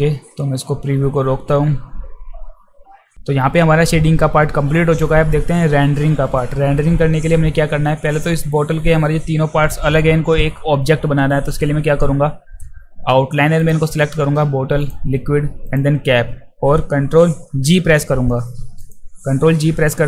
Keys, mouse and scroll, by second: 13.6 click, 14.8 ctrl+click, 15.6 ctrl+click, 17.5 ctrl+g, 18.8 click.